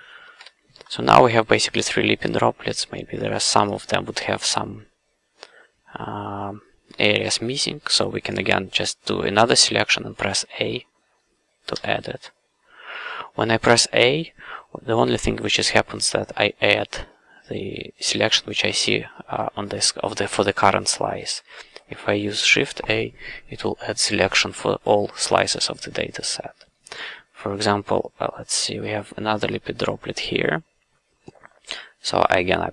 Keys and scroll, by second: 0.3 shift+a, 7.2 c, 11.7 a.